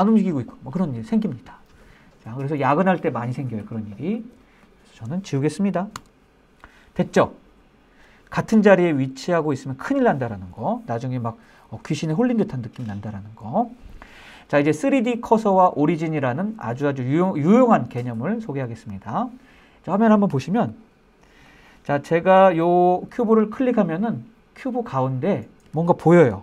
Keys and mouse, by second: 3.9 shift+click, 5.3 x, 20.0 click, 20.8 click.